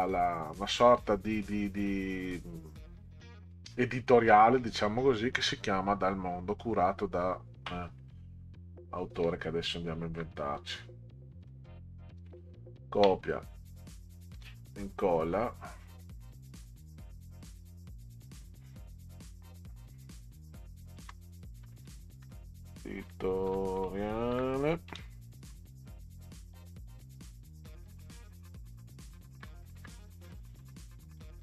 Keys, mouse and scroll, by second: 8.0 click, 9.4 shift+click, 10.4 click, 12.2 ctrl+c, 13.2 click, 14.3 ctrl+v, 16.0 click, 16.2 click, 17.5 click, 21.0-25.5 typing, 27.0 click, 29.8 shift+e, 30.9 click.